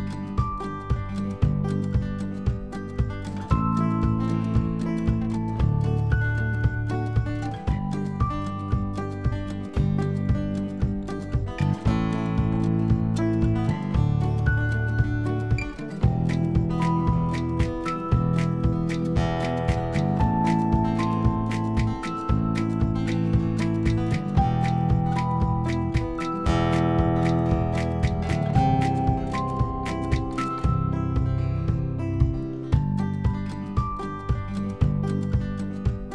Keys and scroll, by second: 26.9 ctrl+z, 32.3 ctrl+z, 35.3 x.